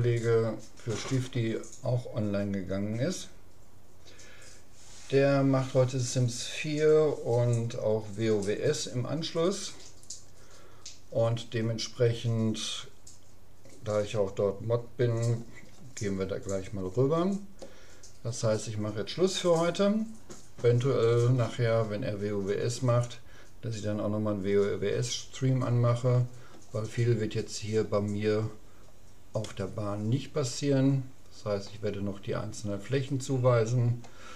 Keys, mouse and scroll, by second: 28.2-31.2 middle drag.